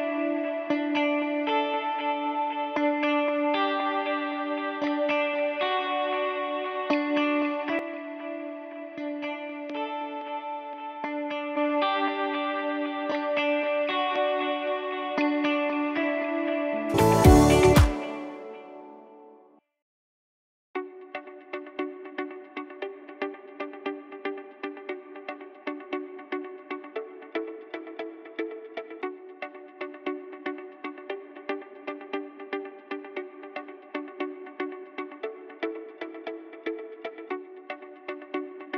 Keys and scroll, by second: 16.3 s.